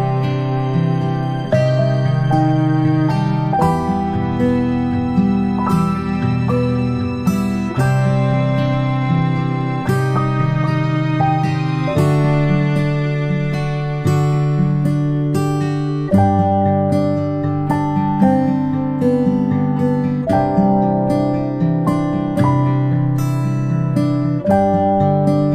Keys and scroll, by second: 2.9 ctrl+alt+a, 4.7 ctrl+alt+a.